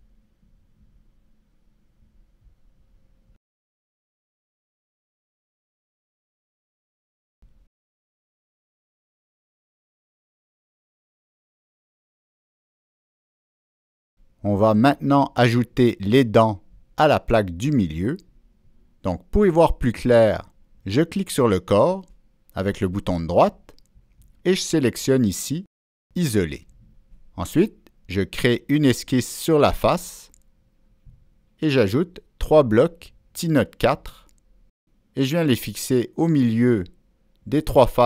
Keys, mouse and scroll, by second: 0.1 click, 2.4 Return, 2.4 Down, 2.4 click, 3.6 click, 5.1 click, 6.5 click, 6.6 click, 7.5 click, 8.1 middle click, 9.3 click, 10.3 click, 11.6 click, 12.9 click, 17.5 click, 20.9 right click, 20.9 click, 24.6 click, 26.5 click, 27.7 click, 30.8-31.9 drag, 33.1 click, 34.0 click, 35.2 click, 35.9 Escape, 35.9 click, 37.6-38.0 drag, 37.7 Escape.